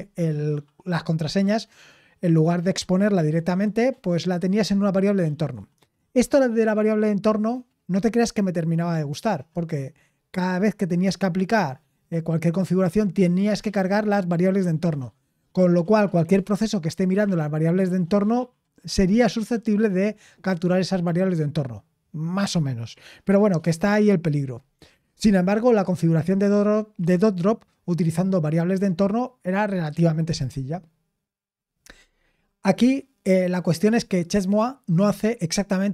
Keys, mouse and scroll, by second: 30.4-35.9 scroll down 2.